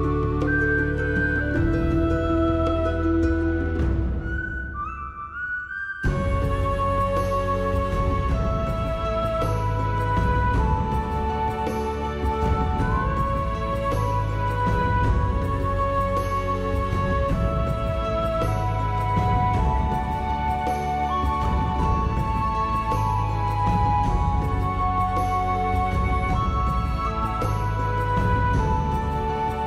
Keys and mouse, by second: 0.0 click, 0.5 Tab, 0.6 shift+middle click, 0.9 ctrl+r, 1.2 right click, 1.6 shift+middle click, 1.8 alt+z, 1.9 click, 2.1 g, 2.5 click, 2.9 click, 3.2 g, 3.5 click, 3.7 click, 3.9 g, 4.6 click, 4.8 middle click, 5.5 click, 5.6 g, 6.0 click, 6.9 Tab, 7.0 alt+click, 7.2 alt+z, 7.6 click, 7.9 x, 8.3 click, 8.5 x, 9.0 middle click, 9.2 alt+middle click, 9.4 alt+middle click, 9.9 click, 10.1 alt+middle click, 10.3 shift+middle click, 11.0 s, 11.1 z, 11.3 KP_0, 11.4 KP_Enter, 12.2 shift+middle click, 12.4 shift+middle click, 12.7 e, 13.6 click, 13.8 middle click, 14.4-16.5 typing, 14.8 middle click, 15.2 alt+click, 15.5 click, 15.7 alt+middle click, 15.8 alt+middle click, 16.4 click, 16.8 middle click, 17.4 alt+z, 17.6 alt+middle click, 17.9 e, 17.9 middle click, 18.8 e, 19.9 right click, 20.2 ctrl+z, 20.5 g, 20.7 right click, 20.9 e, 22.1 click, 22.2 1, 22.4 click, 22.6 g, 22.6 middle click, 23.3 click, 23.6 shift+middle click, 24.1 shift+middle click, 24.9 click, 25.1 alt+z, 25.1 click, 25.4 g, 25.8 click, 26.1 shift+middle click, 26.3 ctrl+r, 26.9 click, 27.2 click, 27.4 g, 27.8 click, 28.0 click, 28.2 g, 28.5 click, 28.9 middle click, 29.3 ctrl+r, 29.6 right click.